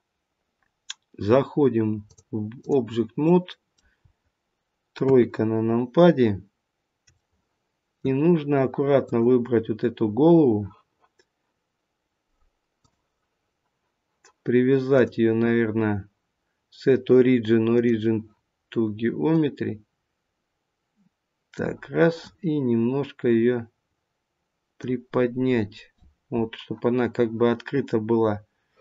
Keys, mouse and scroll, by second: 2.0 click, 3.3 middle click, 4.9 KP_3, 5.7-7.0 scroll up 2, 7.1 shift+middle click, 8.9 click, 12.7 click, 14.9 click, 19.3 click, 22.2 click.